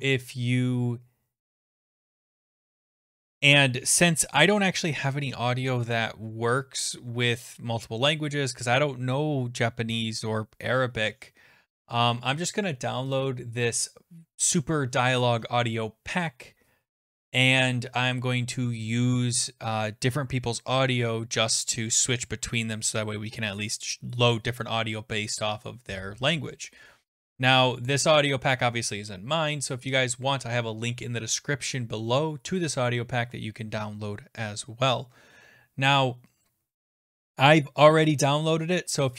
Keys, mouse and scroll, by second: 13.3 click, 37.0 click.